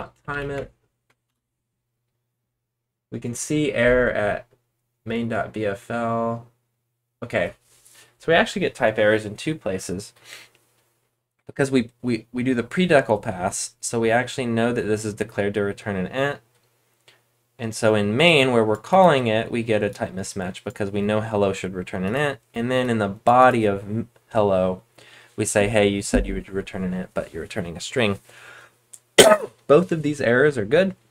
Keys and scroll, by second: 0.5-1.0 BackSpace, 1.2 Return.